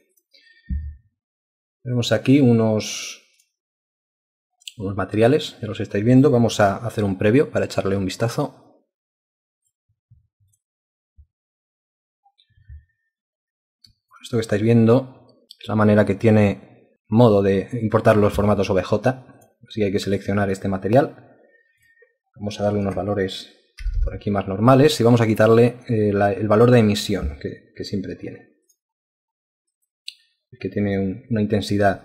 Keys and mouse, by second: 0.2 alt+click, 0.4 alt+double click, 5.3 right click, 7.1 double click, 14.1 alt+click, 23.8 0, 24.0 Return.